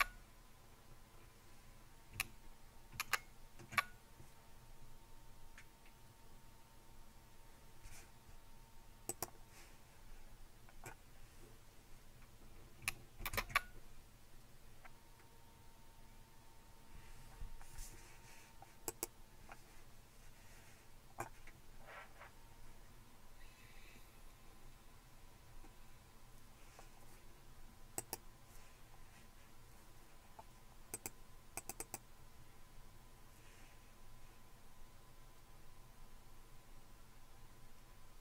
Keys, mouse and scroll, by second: 2.9 super+q, 9.1 click, 13.2 super+space, 14.9 Down, 14.9 Up, 18.9-19.9 drag, 24.5-25.6 scroll down 1, 25.6-26.3 scroll down 1, 28.0-33.2 drag.